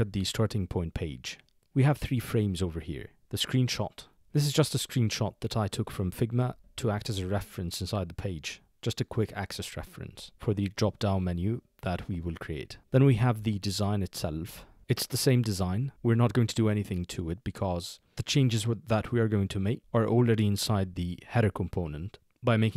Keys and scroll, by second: 14.4 shift+2.